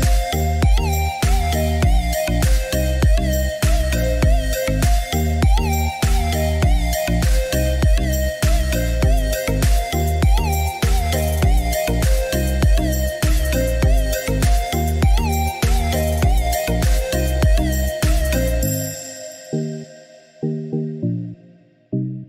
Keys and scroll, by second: 4.4 6, 6.6 Return, 10.9 6, 11.2 Return, 13.4 Delete, 16.8 2, 17.0 Return, 21.6 Escape.